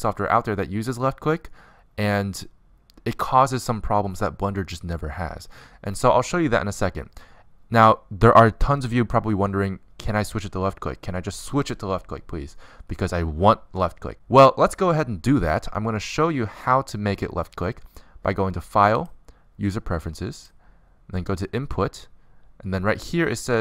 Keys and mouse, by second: 18.9-20.8 drag, 20.6 middle click.